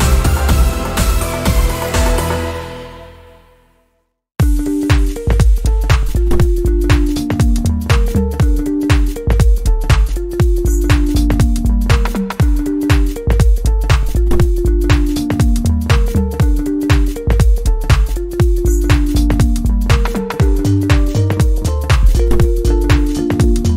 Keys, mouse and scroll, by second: 3.5 scroll down 1, 3.6 scroll up 1, 4.5-16.2 drag, 16.9 click, 17.5-17.9 scroll up 1, 17.9 click, 18.6-19.2 scroll down 1, 19.5 click.